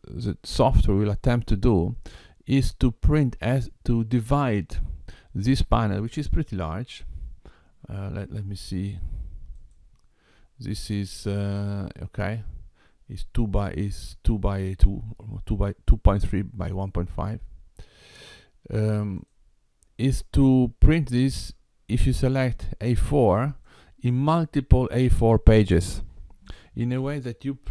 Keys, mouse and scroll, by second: 9.5 click, 18.1 click, 19.1 click, 22.9 click.